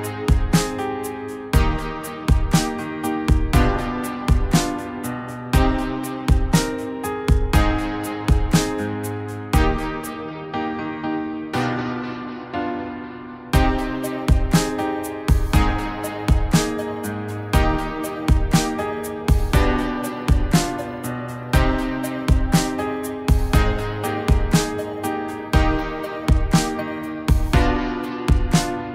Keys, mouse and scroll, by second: 2.1 middle click, 3.4 middle click, 9.7 middle click, 13.3 middle click, 13.9 middle click, 20.4 middle click, 21.0 middle click, 22.2 middle click, 22.4 middle click.